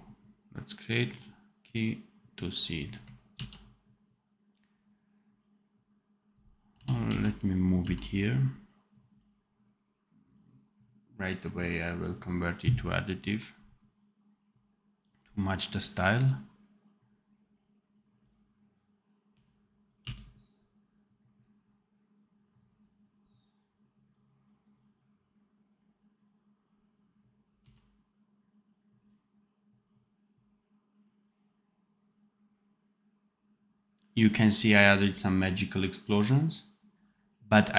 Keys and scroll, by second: 3.3 ctrl+s, 6.6 v, 7.0 x, 7.7 v, 19.2 r, 19.9 f, 27.5 x.